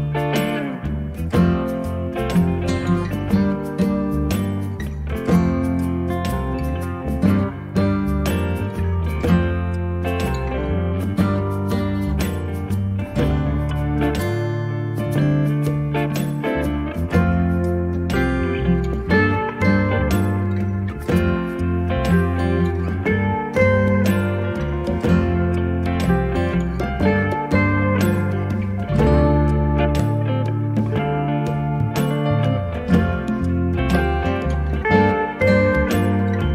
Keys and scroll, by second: 14.8 m, 28.3 space.